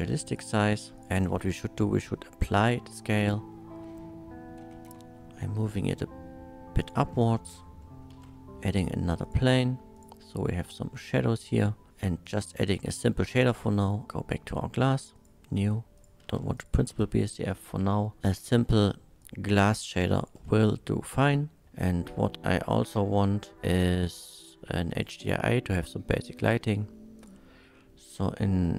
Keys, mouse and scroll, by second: 0.3 click, 1.0 click, 1.3 ctrl+a, 2.5 click, 3.0 click, 3.3-3.8 middle drag, 4.9 z, 6.8 click, 7.5 click, 7.8 middle click, 8.1 shift+a, 9.2 click, 9.9 click, 10.5-11.9 middle drag, 12.2 click, 14.0 KP_Decimal, 15.1 click, 16.0 click, 16.2 x, 16.6 click, 17.5 click, 17.5-19.2 typing, 19.5 click, 20.1 ctrl+shift+click, 20.6 ctrl+shift+click, 21.3-21.6 ctrl+shift+middle drag, 23.8 click, 24.9 click, 27.2 click, 28.6 click.